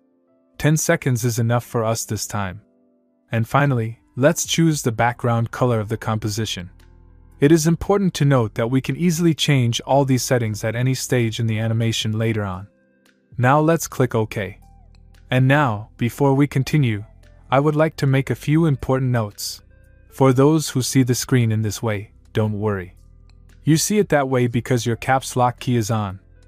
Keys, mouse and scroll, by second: 4.5 click, 7.8 click, 15.3 click, 17.7 click.